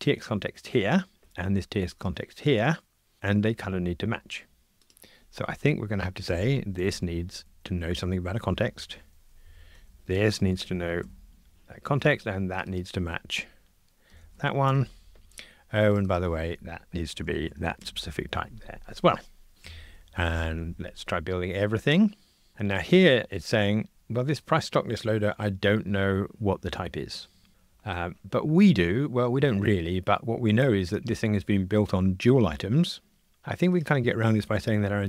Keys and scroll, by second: 9.4 alt+Up, 11.0 Escape, 19.5 F2.